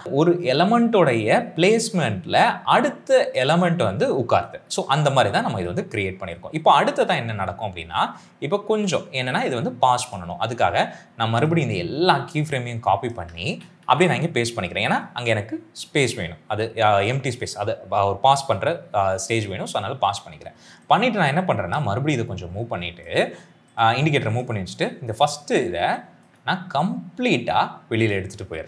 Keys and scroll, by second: 13.4 ctrl+c, 13.8 ctrl+v, 25.7 space.